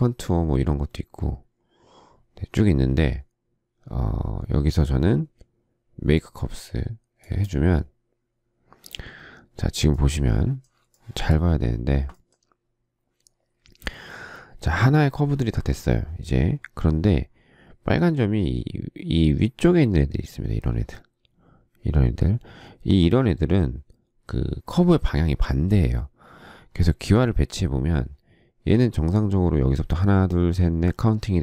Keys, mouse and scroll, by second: 10.9 shift+middle click.